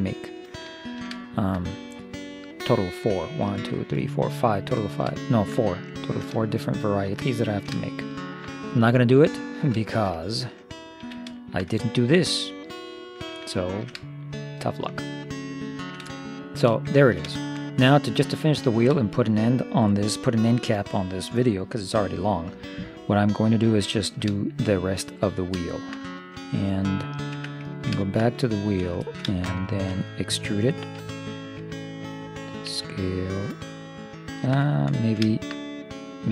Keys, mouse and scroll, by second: 0.8 middle click, 4.8-6.2 middle drag, 6.5-11.4 middle drag, 11.0 z, 12.3 middle click, 14.4-15.7 middle drag, 15.7-18.3 middle drag, 18.3-20.0 right drag, 20.0-21.8 middle drag, 21.9 middle click, 24.0-27.9 middle drag, 27.4 Tab, 28.6-30.0 drag, 28.6-30.0 right drag, 31.0 e, 32.7 s, 35.1-36.3 middle drag.